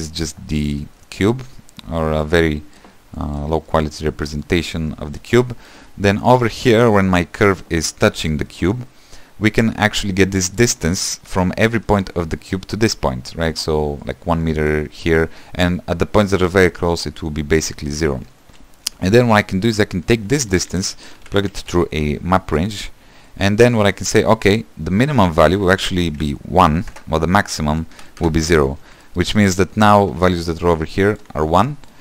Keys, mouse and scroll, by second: 22.6 shift+a, 23.7 click, 26.9-32.0 drag.